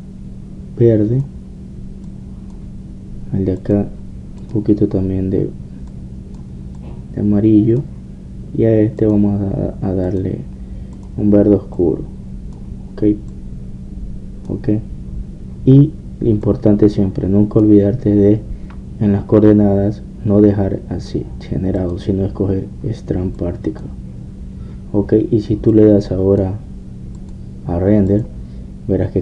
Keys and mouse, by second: 4.6-7.2 drag, 10.0-13.8 drag, 17.5-20.0 drag, 22.8-29.2 drag.